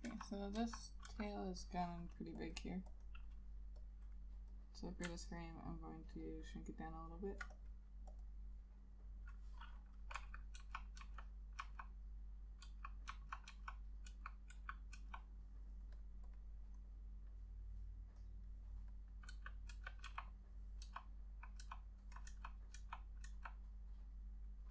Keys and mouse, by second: 0.0-1.2 typing, 1.9 double click, 5.5 alt+click, 8.4 double click, 10.3 [, 10.7 ], 11.1 ], 11.7 ], 13.2 ], 13.6 ], 14.7 [, 15.1 ], 19.4-23.4 typing.